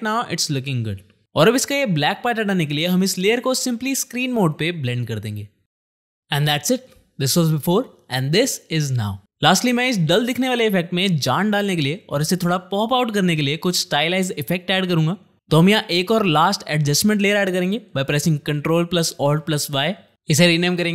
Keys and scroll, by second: 19.5 ctrl+alt+y, 20.1 Return, 20.4-20.9 typing.